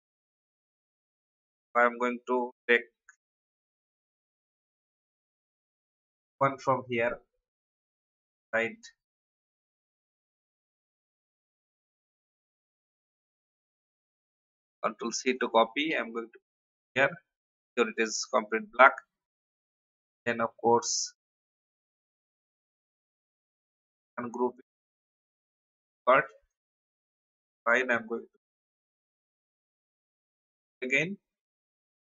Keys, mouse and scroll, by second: 0.1 alt+scroll up 1, 0.9 alt+v, 3.7-4.1 scroll down 1, 5.0 click, 6.9 scroll up 1, 8.7 scroll down 1, 10.9 click, 14.4 ctrl+c, 15.2 click, 15.9 ctrl+v, 17.5 click, 19.5 shift+click, 20.7 shift+click, 21.8 click, 22.8 right click, 23.6 click, 25.3 Delete, 26.5 click, 28.9 shift+click, 30.0 ctrl+g, 31.0 shift+click.